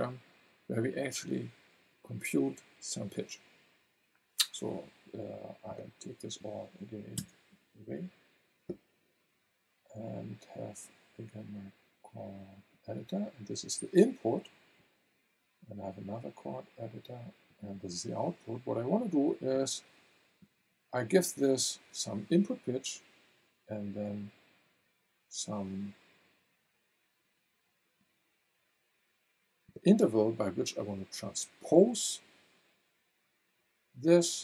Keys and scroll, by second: 7.2 BackSpace.